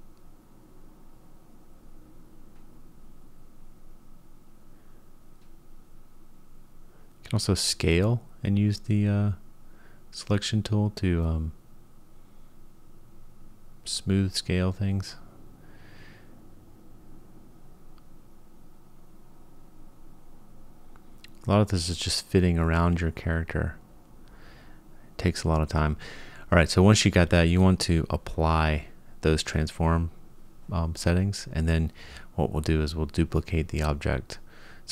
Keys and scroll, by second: 0.5 g, 1.3 space, 6.1 s, 10.0 g, 12.1 g, 13.6 g, 14.7 space, 15.6 Tab, 17.2 Tab, 18.8 g, 22.7 g, 25.3 Tab, 29.3 shift+d.